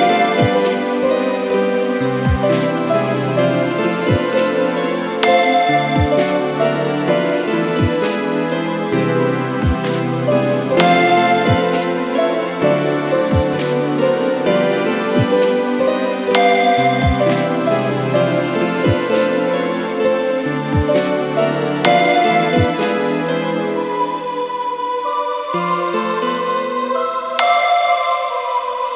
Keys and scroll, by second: 8.0 ctrl+t, 15.2 Return, 15.9 Left, 17.7 Delete, 23.6 Right.